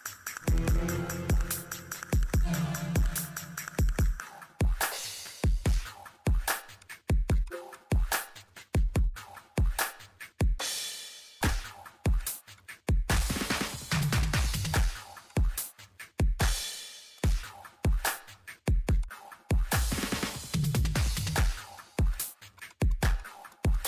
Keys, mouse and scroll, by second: 0.4 scroll up 1, 0.8 click, 0.9 middle click, 1.4 click, 1.7 middle click, 2.3 click, 2.5 middle click, 2.9 scroll up 1, 3.0 middle click, 4.9 click, 7.2 1, 7.3 click, 9.8 middle click, 10.7 click, 10.9 middle click, 11.4 click, 12.0 click, 12.2 scroll up 1, 12.6 click, 12.7 ctrl+middle click, 13.4 click, 14.7 middle click, 15.3 click, 15.4 scroll down 1, 15.8 click, 15.9 middle click, 16.5 click, 16.8 middle click, 17.1 click, 19.1 middle click, 20.0 scroll up 1, 20.1 scroll down 1, 20.3 ctrl+middle click, 21.2 click, 21.5 scroll down 1, 21.6 click, 22.3 Delete, 22.6 click.